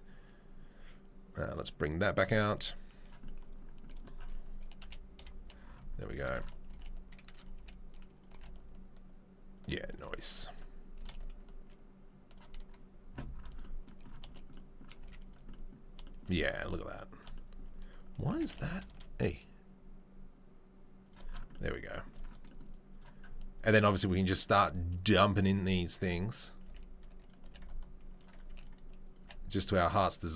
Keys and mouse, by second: 1.3-3.0 right drag, 2.5 s, 3.0-6.2 middle drag, 4.8 KP_3, 5.1 KP_1, 6.7 g, 6.8 shift+middle click, 7.5 s, 8.3 g, 8.4-22.9 shift+middle drag, 11.0 g, 15.0 z, 18.3 g, 22.9-30.3 right drag, 23.0-26.1 drag, 23.0-26.1 middle drag, 26.6 s, 27.4 g, 28.5 s, 29.2 g.